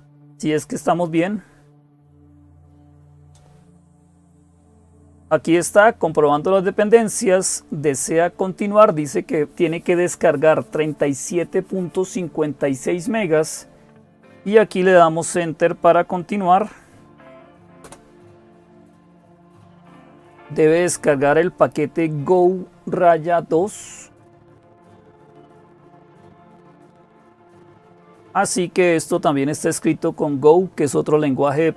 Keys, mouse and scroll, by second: 0.0-31.7 typing, 17.6 Return.